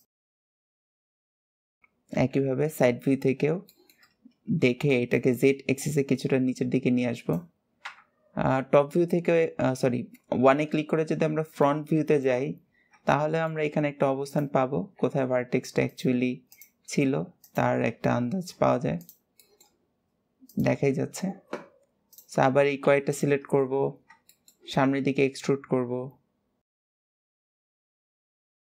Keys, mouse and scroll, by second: 0.1 g, 0.4 click, 0.6 g, 0.9 scroll down 2, 1.1 c, 1.9 KP_3, 2.8-3.4 scroll up 7, 3.4-4.0 shift+middle drag, 4.0-4.9 scroll up 1, 4.9 click, 7.6 KP_1, 8.4 scroll down 3, 9.9-10.2 scroll down 5, 10.4 scroll up 6, 11.4 shift+middle click, 12.3-12.9 scroll down 1, 12.9-13.5 shift+middle drag, 13.5-14.0 scroll up 1, 14.0 click, 14.8 g, 16.2 click, 16.6 g, 17.6-17.9 scroll down 2, 18.8 shift+click, 19.2-20.2 shift+middle drag, 20.2 shift+click, 21.9 shift+click, 22.6 KP_7, 23.3-24.0 scroll down 6, 24.1 shift+middle click, 24.6 e, 26.7 shift+middle click, 26.8 scroll up 4, 27.1 click, 27.2 g, 27.6 shift+middle click, 27.9 click, 28.1 g, 28.5 shift+click.